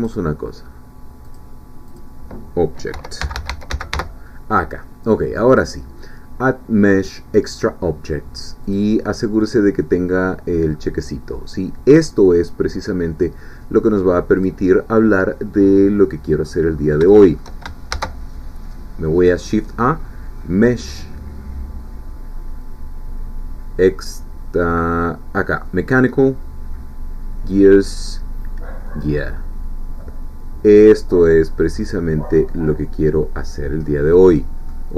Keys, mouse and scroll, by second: 0.0 click, 1.3 click, 1.9 click, 2.9-3.9 typing, 5.5-6.8 drag, 8.7 click, 14.4 click, 15.7 middle click, 16.7-17.1 scroll up 3, 17.1 shift+middle click, 17.9 shift+a, 28.9-30.0 drag, 30.0-32.8 middle drag, 33.8-34.1 scroll up 2, 34.1 middle click.